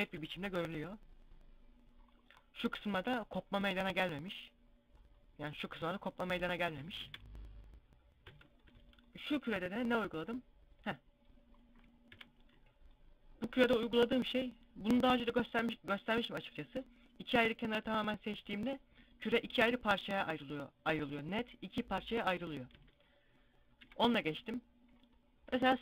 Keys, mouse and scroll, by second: 6.5 a, 6.6 a, 7.8 Tab, 8.3 Tab, 11.8 KP_Divide, 22.6 Tab, 23.6 KP_Divide.